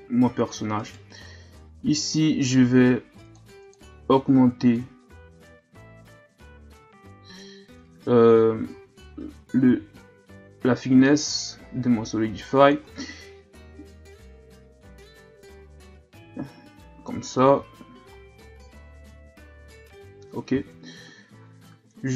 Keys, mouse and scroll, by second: 0.8 right click, 3.3-7.7 drag, 7.8 Tab, 8.5 a, 8.7 a, 9.6 s, 14.0-17.1 drag, 17.5 Tab, 17.8 a, 18.2-18.5 scroll down 2, 19.5 scroll up 1, 20.5 ctrl+s, 21.9 KP_3.